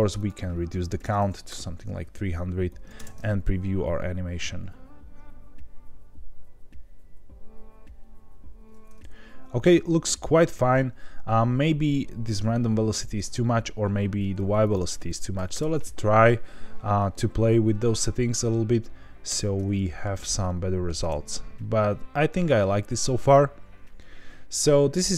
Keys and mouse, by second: 0.1-1.9 drag, 1.2 KP_0, 2.6 drag, 2.9 space, 14.7-16.1 drag, 19.4 space, 19.6-20.0 middle drag, 20.4-20.8 middle drag, 21.0 space, 25.0-25.1 middle drag.